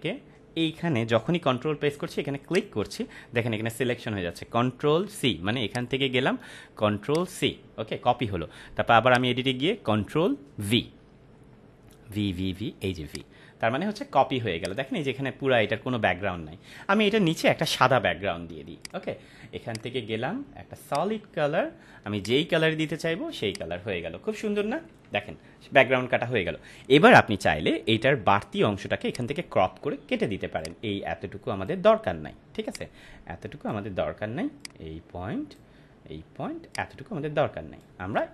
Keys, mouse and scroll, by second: 2.4 ctrl+click, 5.6 click, 13.0 click, 18.8 click, 24.6 ctrl+-, 29.1-31.8 drag.